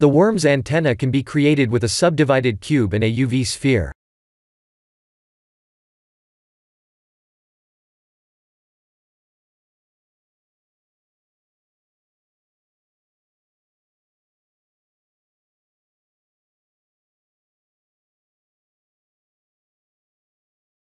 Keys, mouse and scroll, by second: 1.8 shift+a, 7.1 s, 9.1 g, 11.3-12.0 scroll up 2, 12.0 Tab, 12.0 scroll up 1, 12.4 3, 13.4 shift+z, 14.0 click, 14.5-15.4 scroll down 4, 15.6 e, 16.5 r, 17.7 g, 20.3 e.